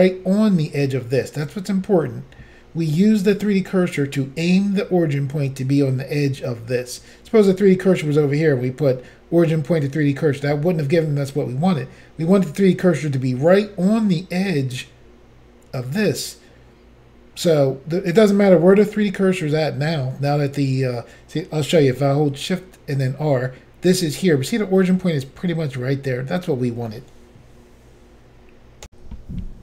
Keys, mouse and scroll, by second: 23.0 shift+right click, 28.9 Insert.